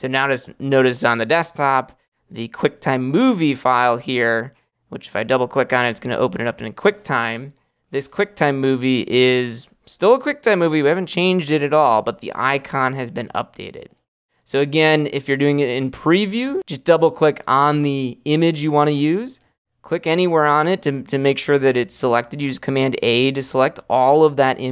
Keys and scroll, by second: 23.0 super+a.